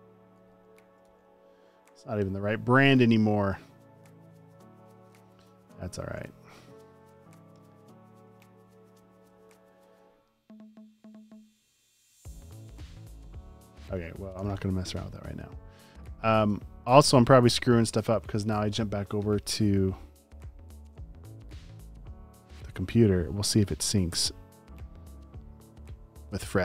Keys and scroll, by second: 0.1 super+space, 0.7 space, 1.1 v, 5.6 Up, 6.4 Right, 7.3 Left, 8.3 Right, 8.6 Up, 9.0 Left, 9.4 Down, 14.5 super+w, 20.9 super+s.